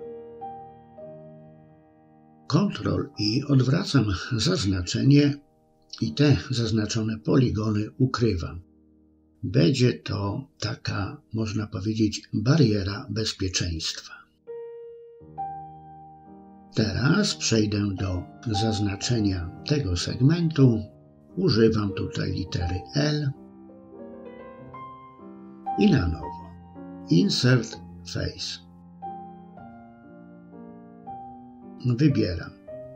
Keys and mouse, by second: 1.9 ctrl+i, 5.5 h, 6.9 middle click, 7.7 shift+middle click, 8.2-9.6 middle drag, 10.1 shift+middle click, 10.8 middle click, 11.5 KP_3, 14.5 l, 18.3-19.4 middle drag, 23.2-27.4 drag, 28.2 click.